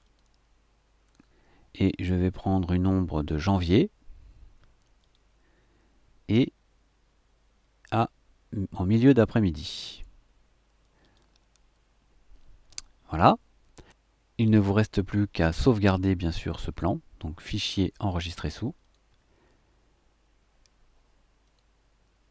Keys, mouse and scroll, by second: 0.1 click, 5.0 click, 11.0 click, 17.5 click, 18.8 click, 21.4 click.